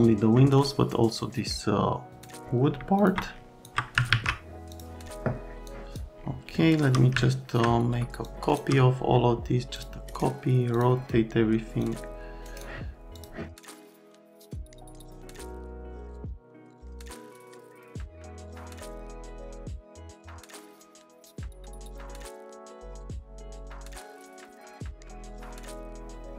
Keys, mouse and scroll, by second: 0.3 middle click, 2.1 click, 3.0 ctrl+click, 3.6 ctrl+click, 4.1 alt+q, 4.7 click, 5.6 click, 6.5 shift+middle click, 7.2 alt+middle click, 8.2 shift+click, 9.7 click, 10.0 scroll up 1, 10.7 click, 11.8 click, 12.4 scroll up 1, 13.1 click, 13.6 click, 13.8 scroll, 14.0 click, 14.4 F3, 14.5 click, 14.7 click, 14.9 click, 15.7 click, 16.5 click, 17.1 click, 17.1 right click, 17.5 click, 18.1 middle click, 18.4 click, 18.6 click, 19.1 click, 19.8 right click, 20.0 right click, 20.2 click, 20.6 right click, 20.7 click, 20.9 click, 22.3 right click, 22.6 1, 22.6 click, 22.7 middle click, 22.8 click, 23.2 click, 23.7 click, 23.9 click, 24.3 click, 24.4 right click, 24.5 click, 24.7 alt+click, 25.0 click, 25.4 click.